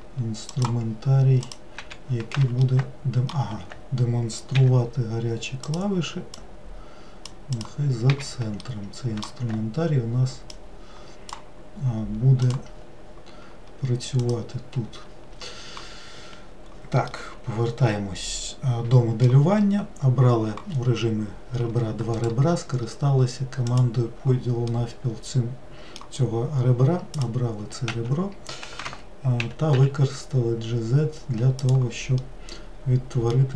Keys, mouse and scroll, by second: 2.6-7.6 middle drag, 7.6 click, 8.0 n, 8.6-10.5 middle drag, 10.5-12.5 drag, 14.2 click, 17.1-20.2 middle drag, 23.8-24.7 right drag, 24.7-27.1 middle drag, 27.1 click, 27.9 w, 28.8 Escape, 29.4 g, 32.2-33.5 middle drag.